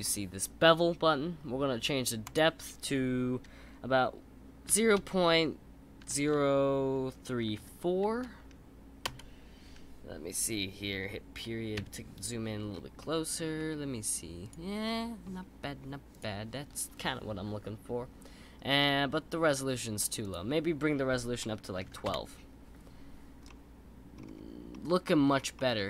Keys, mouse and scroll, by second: 2.2-5.4 drag, 11.7 KP_Decimal, 12.7 scroll up 2, 13.0-14.4 middle drag, 14.4 click, 14.8-16.1 middle drag, 16.1 click, 20.2-23.2 drag, 23.5-24.2 middle drag, 24.2-24.7 scroll up 3, 24.7-25.2 middle drag, 25.2-25.5 scroll down 3, 25.5-25.8 middle drag.